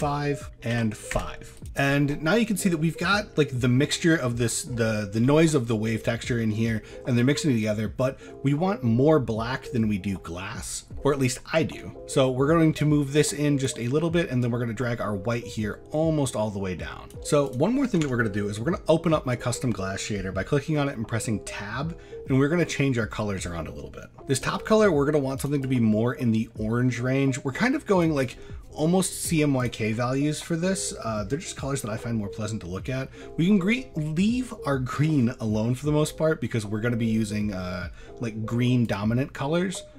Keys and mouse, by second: 0.4 click, 1.6 click, 2.4 middle click, 2.8 shift+middle drag, 3.1 middle drag, 3.7 shift+middle click, 4.3 middle click, 4.9 shift+middle drag, 10.8 middle click, 12.9-13.7 drag, 14.5-17.1 drag, 17.1 middle click, 18.0 Tab, 21.2 middle click, 24.4 click, 25.6-29.7 drag, 30.3 middle click.